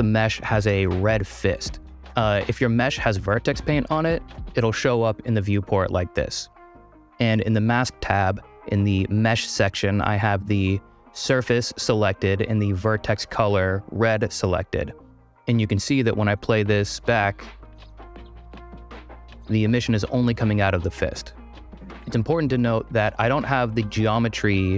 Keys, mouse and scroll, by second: 19.3 space, 19.4 ., 22.1-22.5 middle drag.